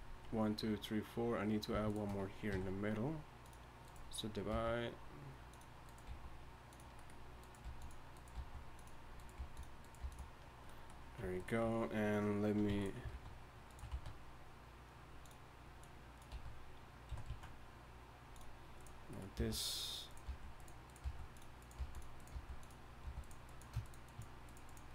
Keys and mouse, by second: 1.8-5.5 right drag, 2.5 w, 4.5 g, 5.8-7.0 right drag, 6.1 g, 7.6 g, 8.1-9.1 drag, 8.3 g, 9.1-10.4 right drag, 9.4 g, 10.0 g, 10.5 right click, 10.7 click, 12.7 e, 13.1 alt+s, 13.9 s, 16.6 s, 19.4-23.0 typing.